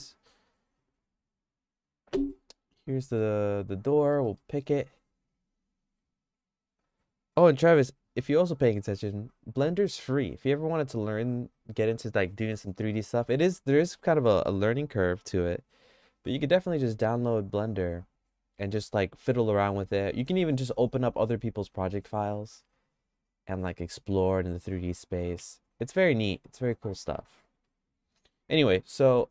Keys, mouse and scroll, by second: 1.4-2.5 drag, 2.5 3, 4.1 middle click, 4.4-9.1 shift+middle drag, 27.1 middle click, 27.6 shift+middle click.